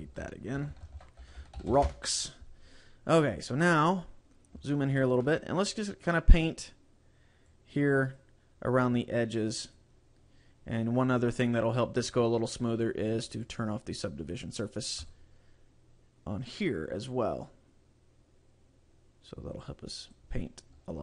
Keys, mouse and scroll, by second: 0.4 click, 4.2 scroll up 1, 4.8 shift+middle click, 7.8 click, 9.1 click, 11.8 click, 13.5 click, 15.4 click, 19.8 click, 20.8-21.0 scroll down 1.